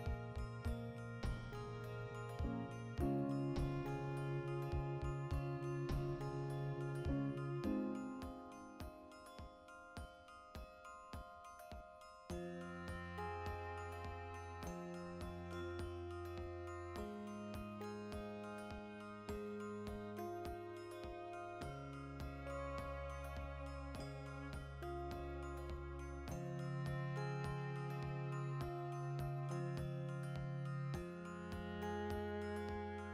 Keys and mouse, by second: 0.0-1.4 drag, 1.4-3.0 shift+middle drag, 2.4 e, 3.0 ctrl+click, 3.3 shift+right click, 3.7 f, 3.9-6.1 ctrl+middle drag, 6.1 right click, 7.0 shift+middle click, 7.6-9.5 shift+right drag, 9.5 w, 18.4 ctrl+z, 19.9 3, 20.2 alt+right click, 20.8 1, 20.9 right click, 21.2 shift+s, 22.3 ., 23.0 3, 23.5 alt+right click, 24.1 shift+d, 26.2 Return, 26.6 shift+r, 27.0-28.1 shift+middle drag, 28.1 right click, 28.7 1, 29.2 a, 29.8 m, 30.4 shift+middle click, 30.7 right click, 30.9 x, 31.8-33.1 alt+right drag.